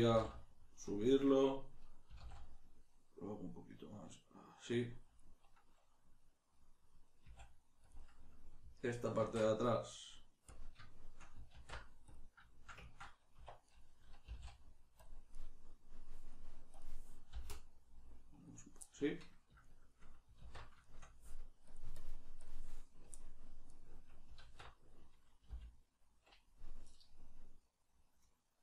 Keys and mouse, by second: 0.1 g, 1.0 click, 2.1 s, 4.8 click, 6.5 middle click, 7.2 s, 7.9 click, 7.9-13.6 middle drag, 9.2 alt+q, 13.4 1, 13.6 right click, 14.2 g, 15.0 click, 15.4 right click, 17.3 g, 18.6 click, 18.8-21.7 middle drag, 20.4 alt+q, 21.7-23.2 drag, 23.2 middle click, 23.7 right click, 24.4 alt+q.